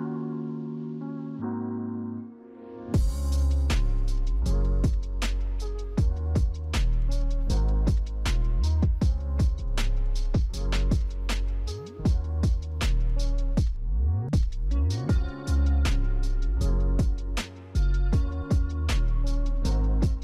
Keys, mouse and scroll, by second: 0.4 right click.